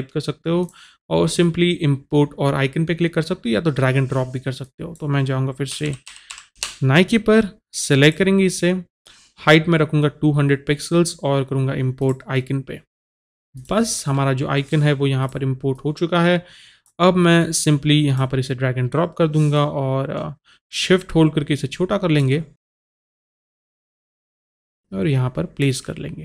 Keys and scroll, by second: 6.0-7.1 typing.